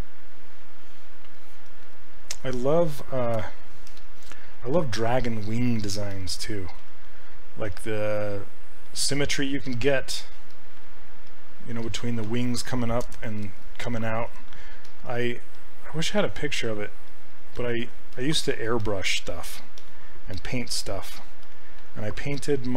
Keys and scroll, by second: 3.4 q, 3.9 s, 6.8 s, 7.7 s.